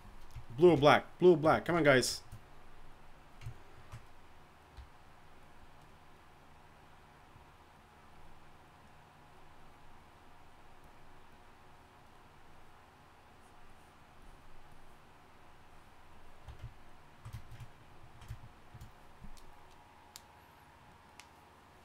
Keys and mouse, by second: 4.7-16.1 d, 6.1-8.0 drag, 16.4 d, 16.4 d.